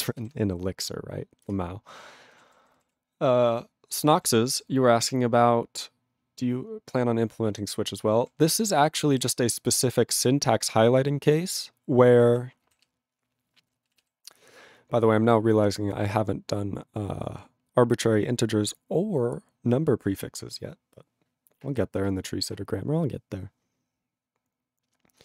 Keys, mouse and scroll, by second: 1.5 ctrl+Return, 2.3 ctrl+a, 2.3 ctrl+n, 2.8 ctrl+e, 3.1 ctrl+p, 3.6 ctrl+p, 4.1 ctrl+a, 4.5 ctrl+p, 7.6 ctrl+n, 8.1 ctrl+p, 9.0 ctrl+=, 12.3 ctrl+e, 12.7 ctrl+b, 13.6 ctrl+b.